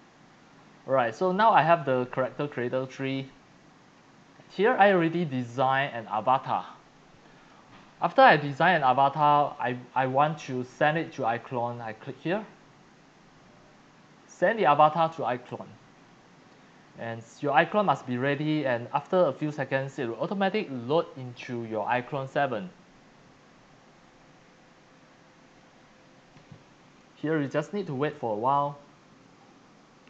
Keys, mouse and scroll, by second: 0.1 click, 1.3 click, 4.1-5.2 drag, 5.2-6.0 scroll down 4, 6.1-7.0 c, 6.1-7.5 drag, 8.1-8.9 c, 8.1 click, 9.5 x, 9.5 click, 9.9 c, 15.5 click, 16.4 click, 17.5 click, 19.4 click, 22.6 click, 24.0-25.6 drag, 28.7 click.